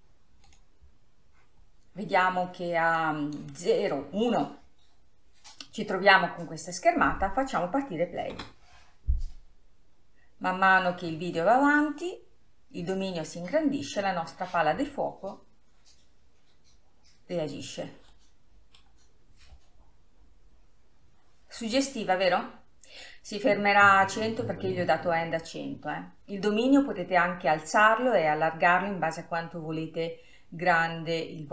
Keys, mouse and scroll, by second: 0.0-6.3 drag, 6.3 scroll up 2, 6.7-7.2 scroll down 2, 22.7-25.3 middle drag.